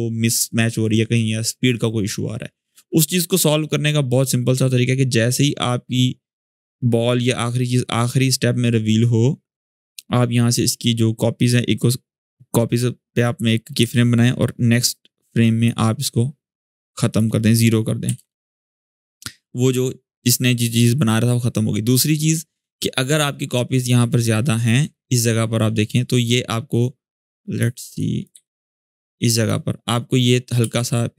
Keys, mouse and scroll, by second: 3.4-9.6 drag, 13.5 u, 14.5-15.4 drag, 17.8 0, 17.9 Return, 19.6-20.4 alt+scroll up 2, 20.4-22.6 drag, 29.5-30.4 scroll up 1, 30.4 space, 30.7 click, 30.9-31.1 space.